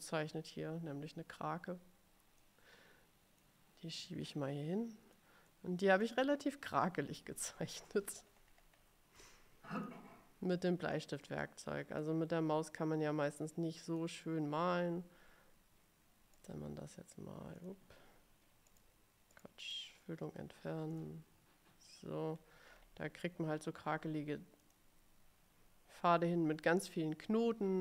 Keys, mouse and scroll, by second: 0.1 middle click, 0.5-0.8 scroll up 1, 2.5-3.7 drag, 4.2-5.5 drag, 5.7 middle click, 7.1 click, 8.3-9.1 ctrl+scroll up 1, 10.1 click, 11.1 click, 12.1-14.3 drag, 16.5 right click, 18.8 right click, 21.0 click, 22.5-23.1 scroll up 2, 23.4 scroll down 1, 24.8 click.